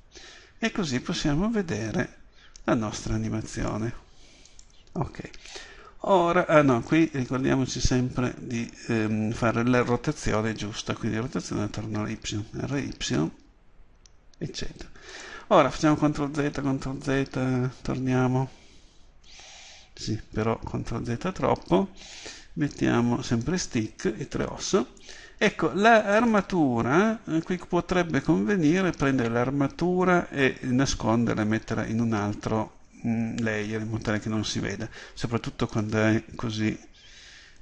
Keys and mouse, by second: 3.8-6.8 right drag, 4.6-5.6 drag, 5.6 r, 7.0-12.5 drag, 12.5 r, 15.3-17.1 drag, 16.1-21.8 ctrl+z, 21.8-26.1 middle drag, 35.7-37.6 drag.